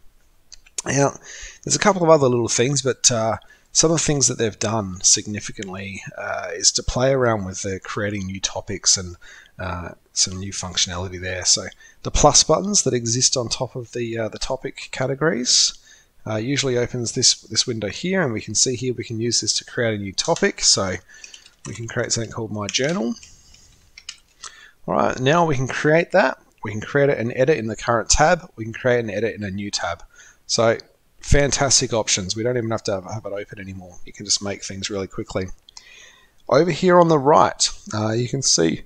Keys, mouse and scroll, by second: 19.6 click, 25.3 typing, 31.9-32.6 typing.